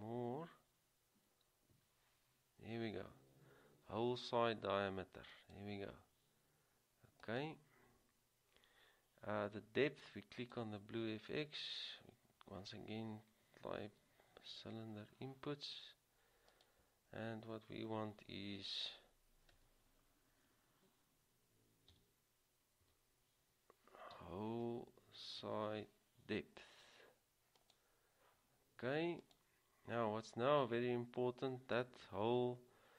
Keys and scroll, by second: 5.2-5.9 typing, 13.9 typing, 20.4 typing, 22.1-23.0 typing, 24.3 typing, 25.6 typing.